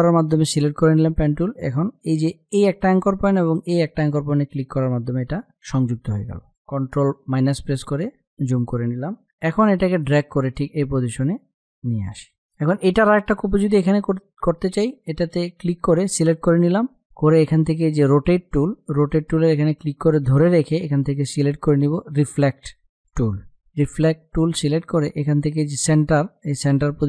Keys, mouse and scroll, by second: 2.5 click, 7.1 ctrl+-, 8.1 space, 8.2 click, 9.8-12.0 drag, 12.4 space, 14.9 click, 18.6-24.9 drag.